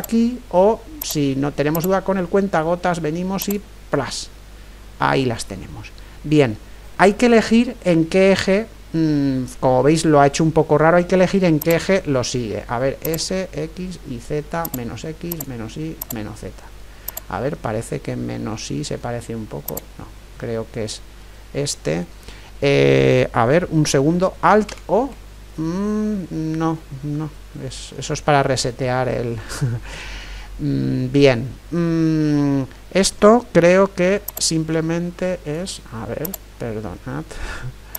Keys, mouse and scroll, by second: 1.8-3.6 drag, 9.3-11.2 middle drag, 11.6-22.2 drag, 17.8-19.6 right drag, 20.4 right click, 21.3-24.7 middle drag, 24.7 alt+o, 26.8-31.4 middle drag, 34.3-37.9 drag.